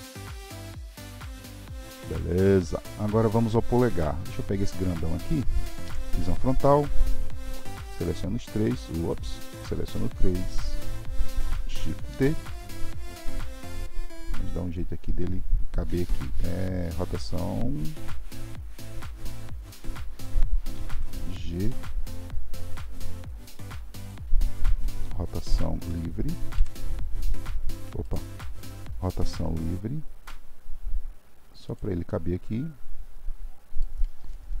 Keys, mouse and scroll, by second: 1.1 g, 1.6-2.9 shift+middle drag, 5.8 KP_1, 7.8 shift+click, 9.0 shift+click, 9.5 shift+click, 12.1 shift+d, 32.1-34.6 middle drag.